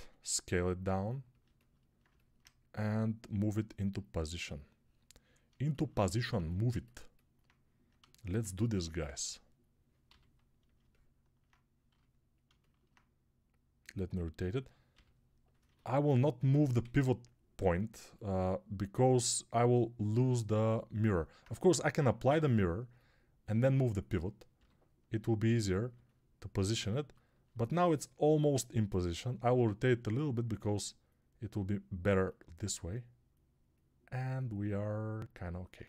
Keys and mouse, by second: 1.3-2.8 alt+shift+middle drag, 2.8-10.6 drag, 9.9 g, 10.6-14.8 alt+middle drag, 11.8 g, 14.8 click, 14.8 g, 15.5-19.7 alt+middle drag, 16.7 g, 19.7-22.7 drag, 21.5 g, 22.7-35.7 alt+middle drag, 24.4 g, 35.7 ctrl+alt+click.